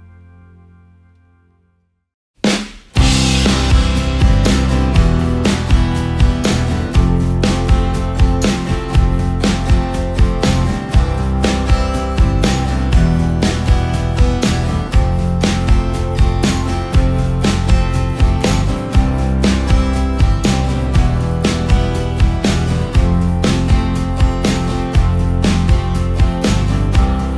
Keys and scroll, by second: 0.3 Up, 1.5 ctrl+space, 2.4 ctrl+space, 3.3 ctrl+space, 3.8 ctrl+space, 5.1 Down, 5.3 Down, 7.1 ctrl+space, 11.7 space, 12.7 ctrl+space, 12.9 ctrl+KP_0, 18.6 space.